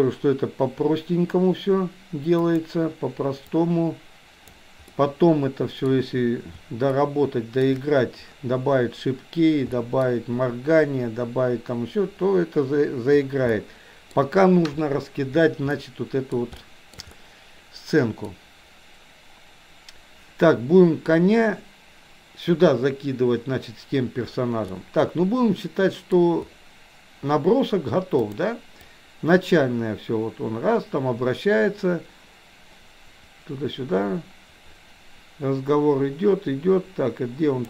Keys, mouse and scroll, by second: 3.6-4.7 drag, 4.9-5.9 middle drag, 6.9-7.6 shift+middle drag, 9.7 middle drag, 13.6-14.1 middle drag, 15.8-16.3 middle drag, 16.6-16.9 shift+middle drag, 17.1-18.3 middle drag, 24.7-26.1 middle drag, 28.2 click, 28.9-37.6 drag.